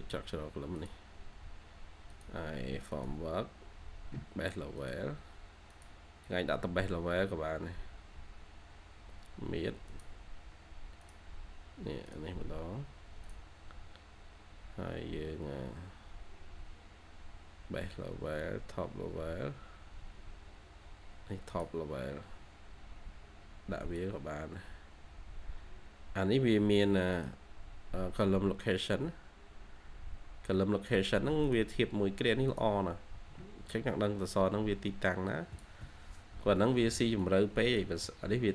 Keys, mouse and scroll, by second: 6.6-6.9 scroll down 1, 6.7-8.4 typing, 7.2-7.6 scroll up 1, 7.6 scroll down 1, 14.1 scroll, 14.2-14.5 scroll down 1, 24.8 scroll up 1, 28.5-29.0 scroll down 1, 29.0-30.1 scroll up 1.